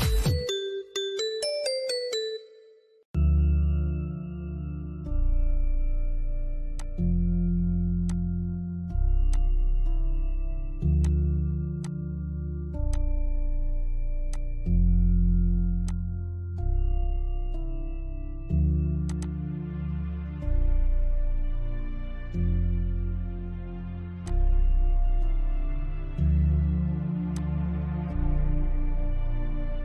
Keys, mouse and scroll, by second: 6.0 click, 18.3 click, 19.8 scroll up 1, 21.3 middle click, 23.5 click, 25.1 Left, 26.5 click, 27.2 Right.